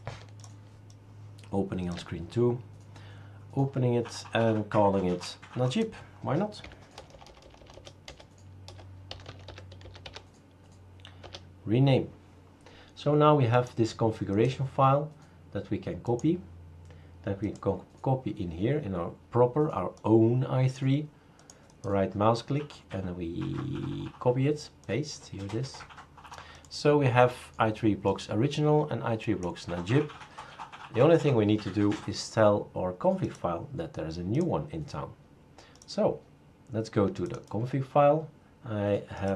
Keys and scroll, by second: 6.6 Left, 6.9-10.5 typing, 11.2 Return.